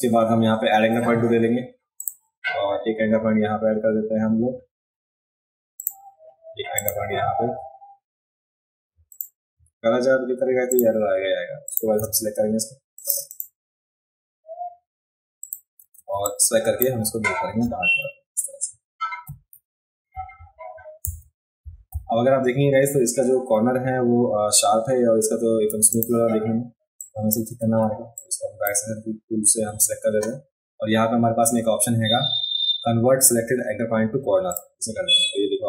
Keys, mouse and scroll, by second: 2.0 click, 5.8 click, 6.8 click, 6.8 right click, 9.2 click, 9.2 right click, 10.8 click, 10.8 right click, 11.7 click, 11.7 right click, 13.0 click, 13.3 click, 15.4 click, 16.0 a, 16.3 click, 25.7 v, 25.9 click, 27.0-27.3 drag, 28.2-28.7 drag, 34.5 click.